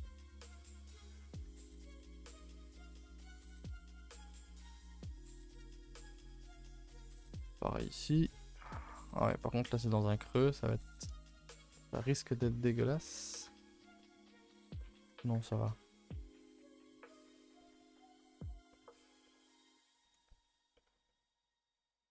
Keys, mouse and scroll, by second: 0.0-0.6 middle drag, 0.6 scroll down 1, 0.8-1.5 middle drag, 1.5 Tab, 1.6-3.1 middle drag, 3.1 scroll up 2, 3.4 middle click, 3.8 click, 4.0 g, 4.5 middle click, 4.9 g, 5.4 shift+middle click, 5.9-6.6 scroll up 6, 6.2 middle click, 6.6 middle click, 7.0 a, 7.1 a, 7.2-8.6 shift+middle drag, 8.6 k, 8.9-11.9 middle drag, 11.9 2, 12.0 click, 12.8 ctrl+Delete, 13.4 1, 13.7 click, 14.0-15.3 middle drag, 15.3 g, 16.5 click, 16.8 a, 16.9 a, 17.0 scroll down 2, 17.1 Tab, 17.4 a, 17.6 a, 17.6-17.9 middle drag, 17.9 ctrl+s, 18.1 scroll down 4, 18.3-19.1 middle drag, 19.1 scroll down 1, 19.3-22.1 middle drag.